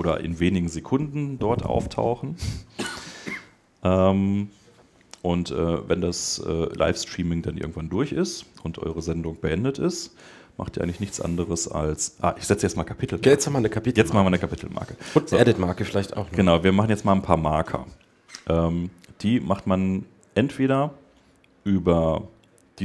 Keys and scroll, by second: 7.2 super+Tab.